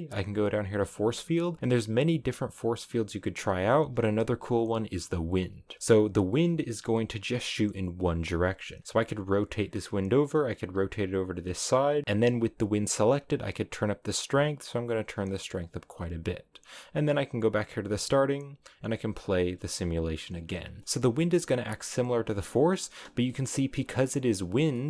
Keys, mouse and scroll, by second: 5.3-8.0 scroll down 2, 8.8 r, 9.8 g, 10.4 r, 10.9 g, 11.5 middle click, 12.2 g, 13.3-16.4 drag, 17.5-20.8 drag, 20.8 scroll up 3, 21.1-23.1 middle drag, 23.1 scroll up 1, 23.2 shift+middle click, 23.7-24.6 scroll up 2, 24.6-24.8 middle drag.